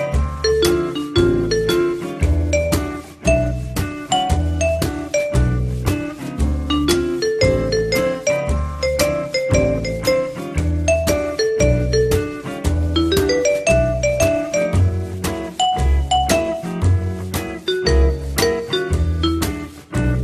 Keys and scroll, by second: 3.5 alt+q, 4.6 f, 5.1 z, 15.2 t, 15.9 z, 17.1 F3.